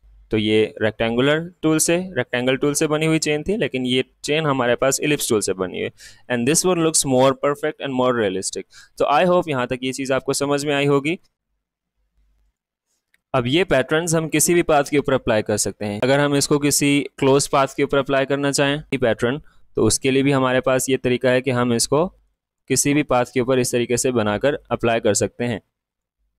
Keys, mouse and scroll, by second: 5.7 click, 5.8 alt+scroll up 1, 9.5 alt+scroll up 1, 9.6-9.9 alt+scroll down 1, 10.6 click, 10.9 space, 11.1 space, 11.4 ctrl+z, 12.5 click, 16.0-23.9 drag, 23.9-25.9 shift+drag.